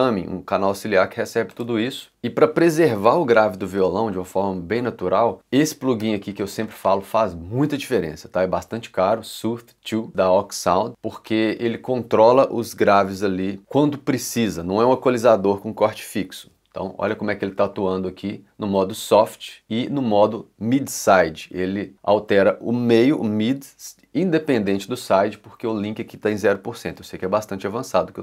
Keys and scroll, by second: 6.0 l.